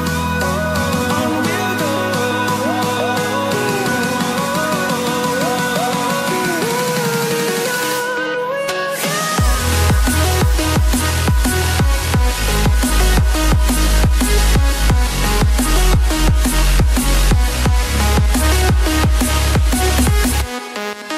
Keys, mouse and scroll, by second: 2.2 click, 4.7 scroll up 1, 8.7 click, 9.4-9.7 scroll down 1, 9.7 scroll up 1, 11.1 click, 14.9-15.2 scroll down 1, 15.2 click, 16.7 double click, 17.5 click, 18.2 ctrl+z, 18.7 click.